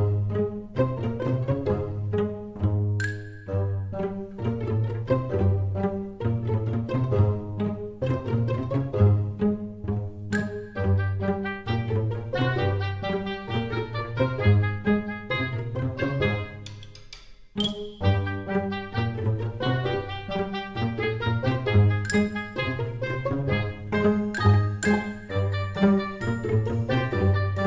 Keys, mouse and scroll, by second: 0.3 scroll up 6, 1.0-1.7 scroll down 2, 1.7-3.0 scroll down 2, 3.0 click, 9.0 s, 16.8 click, 19.3 Tab, 19.8 e, 23.0 Tab, 24.2 click, 25.1 scroll up 4, 25.9 middle click.